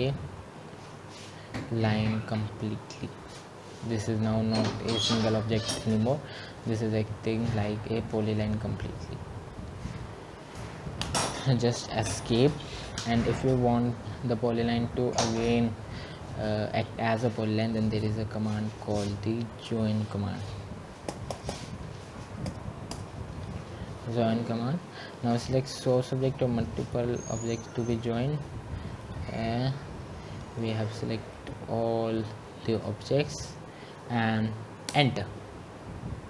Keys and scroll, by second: 21.3 Escape.